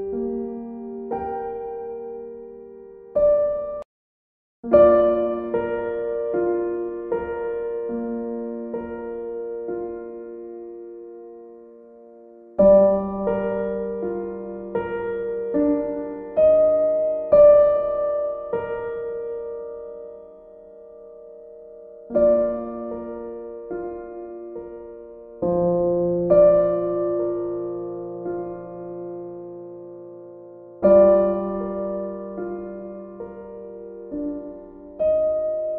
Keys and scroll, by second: 8.6 e, 31.2 ctrl+d.